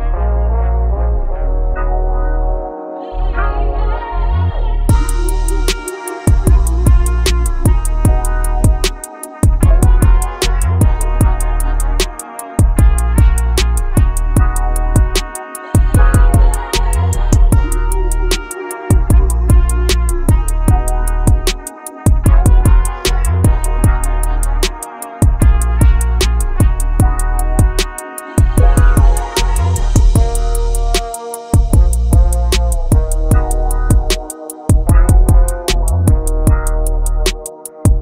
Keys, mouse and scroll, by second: 2.7 scroll down 1, 3.0-3.3 middle drag, 3.3 KP_7, 3.8-4.6 scroll up 2, 5.6 click, 7.7 shift+d, 9.2 shift+scroll down 1, 9.3 shift+middle click, 9.7 shift+d, 10.3 shift+d, 10.8 scroll down 4, 11.3 shift+middle click, 11.5 scroll up 5, 11.6 middle click, 11.8 shift+d, 13.3-13.7 scroll down 6, 13.7-14.2 scroll up 3, 14.2 shift+scroll down 1, 14.3 shift+middle click, 14.4 scroll up 1, 14.4-14.8 scroll down 3, 14.8-15.3 scroll up 5, 15.3 click, 16.2 s, 16.7 click, 16.8 s, 16.9 click, 17.1 scroll up 5, 17.1 scroll down 4, 17.5 click, 17.7 middle drag, 18.0 shift+a, 19.0 middle click, 19.4 s, 20.6 g, 21.5 middle click, 21.7 KP_7, 21.8 s, 22.8 right click, 23.2 scroll down 2, 23.3 middle click, 23.4 scroll up 2, 23.5 middle click, 24.5 middle click, 24.6-25.0 scroll up 1, 25.0 g, 26.1 middle click, 26.1-26.9 scroll down 33, 26.2 click, 27.1 click, 28.0 click, 28.3-28.7 scroll down 2, 28.5 click, 28.7 middle click, 28.9-29.3 scroll up 14, 29.3 click, 29.4 scroll down 1, 29.4 middle drag, 30.4 shift+click, 31.1 shift+click, 31.8 shift+click, 32.1 shift+click, 33.0 m, 33.6 BackSpace, 34.5 scroll down 17, 34.7 scroll up 5, 35.0 right click, 35.8-36.4 drag, 36.7 click, 36.8-37.3 scroll down 3, 37.3 shift+click, 37.6 scroll up 3, 37.7 shift+click.